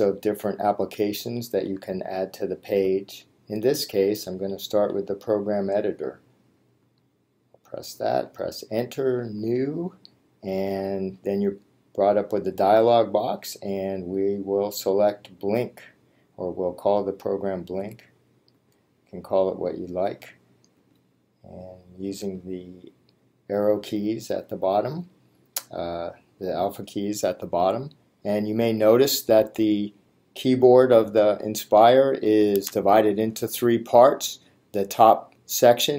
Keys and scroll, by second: 7.0 Return, 18.6 b, 20.2 l, 20.8 i, 23.7 k.